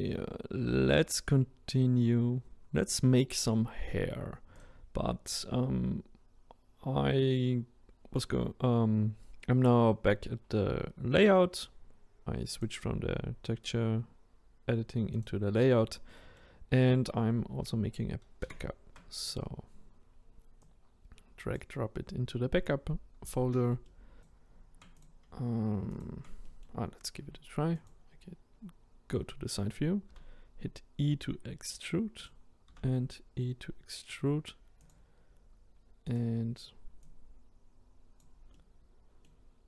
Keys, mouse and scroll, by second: 4.6 click, 12.5-15.2 drag, 16.2-18.4 middle drag, 18.4 shift+d, 21.5 click, 23.3 click, 23.9-24.2 middle drag, 24.2 click, 26.0 shift+click, 26.5-27.8 middle drag, 27.8 click, 30.1 e, 32.7 e, 36.2 click, 37.0 click, 38.5-39.5 middle drag, 39.5-39.6 scroll up 2.